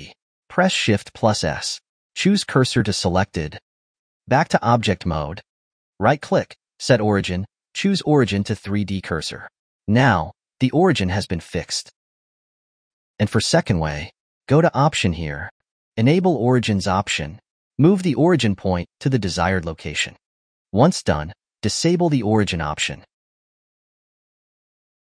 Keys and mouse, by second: 1.2 shift+s, 4.3 ctrl+Tab, 6.3-9.2 right drag, 10.0 r, 11.1 middle click, 11.3 r, 12.2-13.0 middle drag, 13.0 ctrl+z, 15.5-17.9 drag, 18.2 g, 19.1-19.5 middle drag, 19.5 g, 19.9-21.4 middle drag, 21.4-23.4 drag, 23.5 r, 24.0 middle click, 24.2 e, 24.3 r.